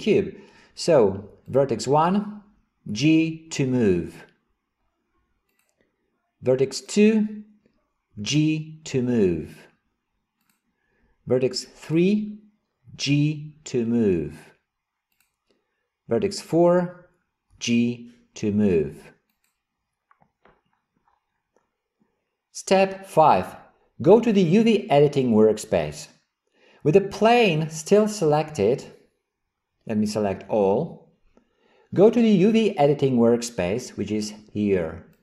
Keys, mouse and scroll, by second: 1.5 click, 2.9 g, 6.8 click, 8.2 g, 11.9 click, 12.9 g, 16.4 click, 17.6 g, 30.5 a.